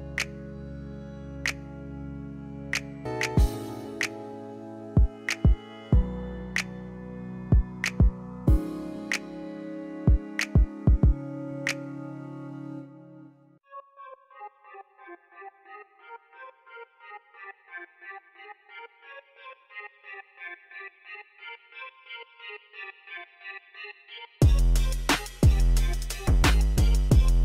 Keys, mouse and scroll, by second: 2.6 shift+click, 4.0 KP_8, 4.2 KP_0, 4.5 Return, 7.7 click, 9.1 click, 11.3 click, 15.1 click, 16.9-21.8 middle drag, 24.3 click, 25.3 click.